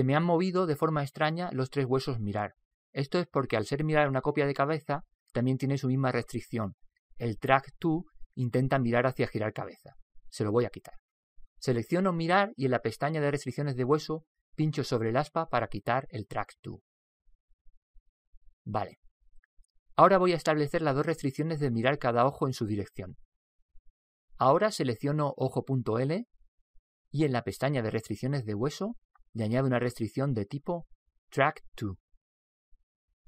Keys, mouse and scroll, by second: 13.0 right click, 15.1 click, 17.5 click, 26.6 right click, 28.5 click.